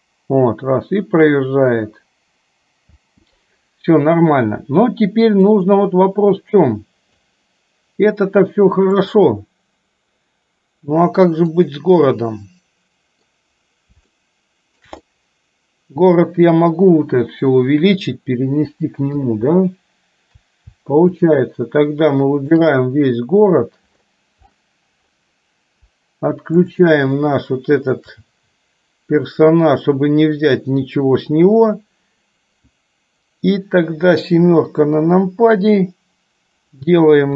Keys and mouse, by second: 3.1 space, 5.6-7.5 drag, 9.0-9.8 drag, 11.6-13.5 middle drag, 14.4-15.1 shift+middle drag, 15.2-16.7 middle drag, 21.2-22.8 shift+drag, 26.7-27.3 shift+drag, 34.4 KP_7.